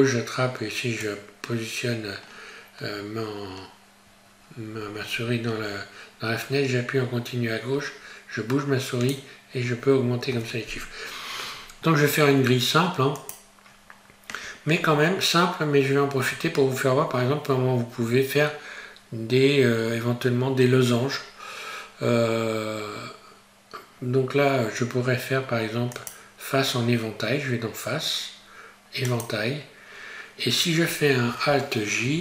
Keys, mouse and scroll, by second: 1.0 click, 13.1 click, 25.9 click, 32.0 alt+j.